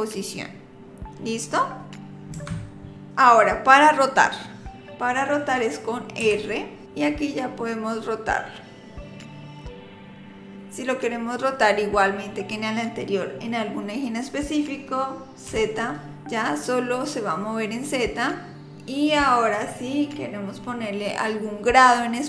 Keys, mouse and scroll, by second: 6.2 r.